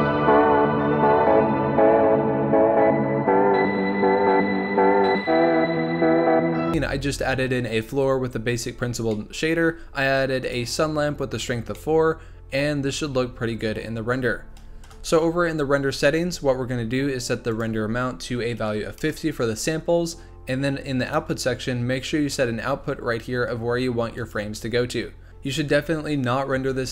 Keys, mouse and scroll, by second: 0.1 click, 0.6-1.6 scroll up 3, 1.8 click, 3.3 z, 4.0 click, 4.1 right click, 4.4 z, 8.2-9.1 scroll down 5, 9.1-9.6 middle drag, 9.6-10.4 scroll down 4, 10.4 click, 10.9-11.4 scroll up 1, 11.4-11.7 scroll up 3, 11.7-14.8 middle drag, 14.8 KP_0, 15.8-17.5 scroll up 7, 17.5-21.1 drag, 24.2-24.6 drag.